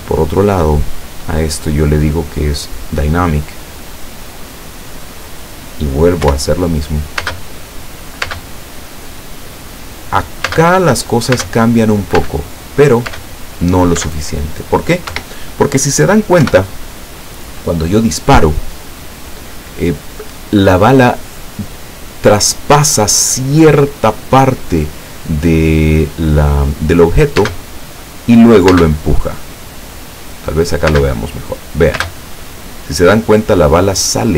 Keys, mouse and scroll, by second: 0.4 click, 2.0 click, 3.2 click, 5.0 click, 6.3 p, 8.4 space, 10.6-14.1 typing, 15.2 Escape, 16.5 p, 27.6 space, 28.8 space, 31.0 space, 32.1 space.